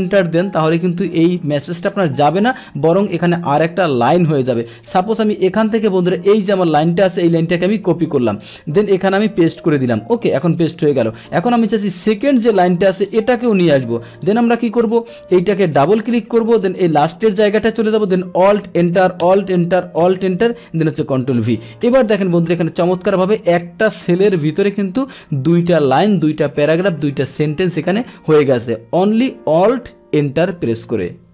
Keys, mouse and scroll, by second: 2.9 click, 4.6 click, 6.1 click, 7.3 ctrl+c, 7.9 Escape, 7.9 ctrl+c, 8.3 Escape, 8.3 click, 9.4 ctrl+v, 10.3 click, 11.2 click, 12.3 click, 13.4 ctrl+c, 14.1 click, 15.5 click, 15.7 click, 16.6 click, 18.5 alt+Return, 19.4 alt+Return, 20.1 alt+Return, 21.3 ctrl+v, 21.9 Return, 22.8 click.